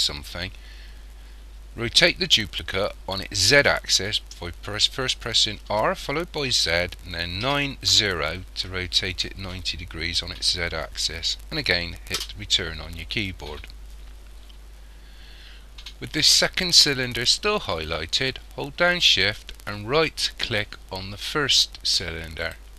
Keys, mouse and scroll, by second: 5.7 r, 22.5 shift+right click.